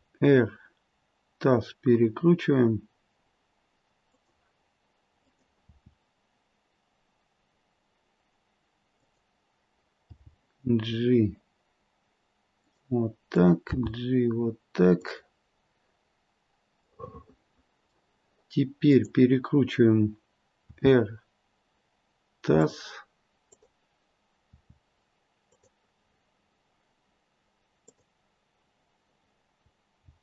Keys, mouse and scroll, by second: 5.2 click, 5.7 r, 10.2 g, 13.3 click, 14.0 g, 15.6-16.3 scroll down 2, 16.8 middle click, 18.9 click, 20.6 r, 23.4 click, 24.4 r, 26.1-27.2 scroll up 3, 27.8 click, 30.0 g.